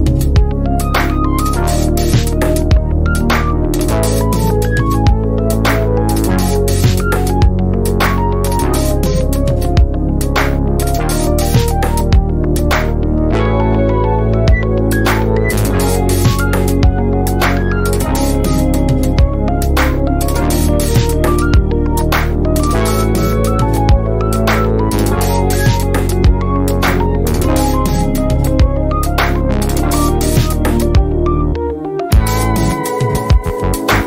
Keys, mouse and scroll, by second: 0.1 ctrl+shift+c, 0.6 F1, 1.3-2.3 click, 2.8 F1, 3.4-4.3 drag, 7.8 F1, 8.4-9.3 click, 9.4 ctrl+scroll down 1, 9.8 z, 10.3 click, 10.6 F1, 11.5 shift+right click, 12.4 b, 14.2 ctrl+alt+click, 15.0 ctrl+alt+click, 15.4 F1, 16.2-17.0 drag, 20.2 F1, 20.8-21.8 drag, 22.8 F1, 23.5-24.7 drag, 27.1 Delete, 28.4-29.7 drag, 33.6 ctrl+scroll down 1, 33.9 F1.